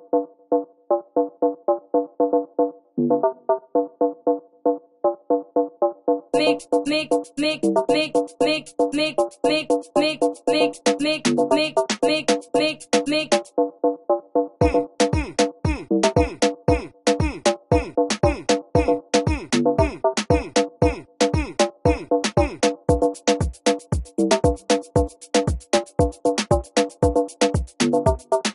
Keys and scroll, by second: 20.6 F1, 20.8 F1, 21.1 F1, 25.4 F1, 27.6 alt+F8, 27.8 F1, 28.0 F6, 28.1 F7, 28.4 F1.